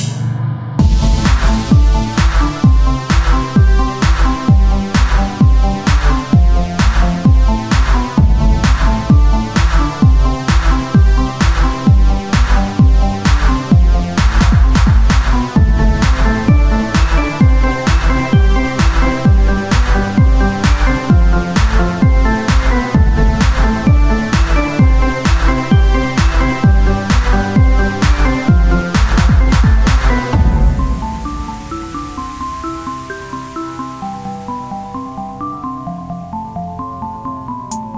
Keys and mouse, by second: 1.1 r, 1.9 z, 2.8 z, 3.9 Tab, 5.0 click, 5.2 right click, 5.6 middle click, 6.7 z, 7.1 c, 9.5 c, 10.2 z, 17.7 Tab, 20.7 Tab, 25.5-27.8 middle drag, 27.8 click, 29.6-31.0 drag, 30.1 right click, 31.0 z, 31.2 c, 32.4-34.6 drag, 34.6 r, 35.7-37.4 drag, 37.2 z.